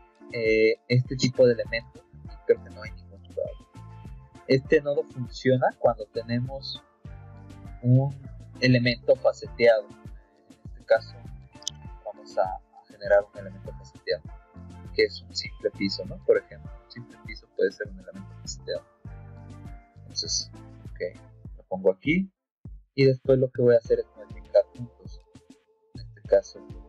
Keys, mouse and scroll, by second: 0.9 middle click, 2.6 middle click, 2.8 middle click, 6.2 middle click, 6.8 middle click, 11.5 Escape, 14.1 click, 14.7 click, 16.1 click, 18.6 click, 19.4 middle click, 21.2 click, 22.0 click, 23.6 click, 24.5 middle click, 24.6 scroll up 1, 26.2 click.